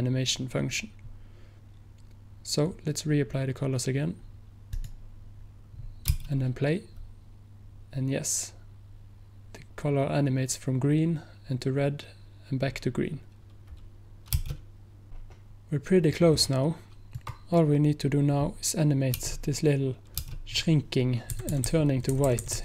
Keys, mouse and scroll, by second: 4.9 click, 15.1 click, 17.2-19.3 drag, 21.4 Right, 21.6 Right, 21.7 Right, 21.9 Right.